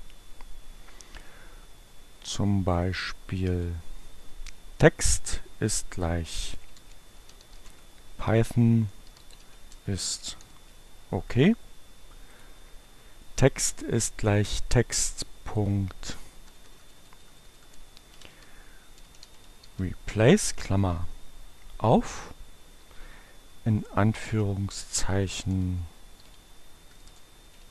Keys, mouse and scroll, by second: 2.3-3.9 drag, 5.2 shift+p, 6.4-10.7 typing, 12.4 click, 15.6 click, 16.1 BackSpace, 17.7-20.1 typing, 20.1 Right, 22.6 shift+2, 25.0-27.7 typing.